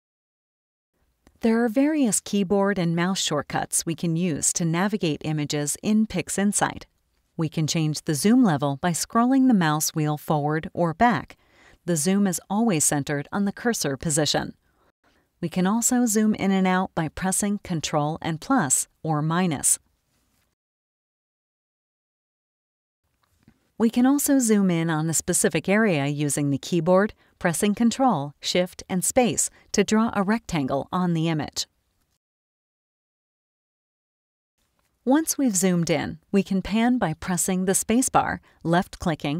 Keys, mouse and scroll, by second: 8.3-9.5 scroll up 6, 8.7 middle click, 9.9 middle click, 10.0-10.9 scroll down 2, 11.2 scroll down 2, 11.6 middle click, 11.6-12.9 scroll up 2, 13.3 middle click, 13.4-14.0 scroll down 2, 18.4 ctrl+KP_Add, 19.5 ctrl+KP_Subtract, 20.7 ctrl+KP_Add, 21.7 ctrl+KP_Subtract, 29.1 ctrl+shift+space, 30.3 ctrl+shift+click, 37.7 space, 38.7 click.